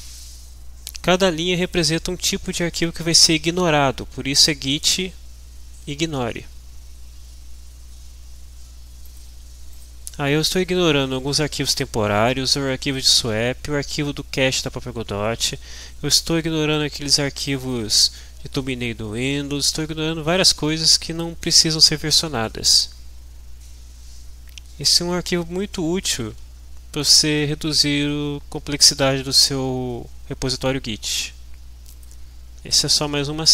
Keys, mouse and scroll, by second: 1.0-2.4 drag, 9.0 click, 9.7 click, 17.6 click, 30.5 click, 31.9 click.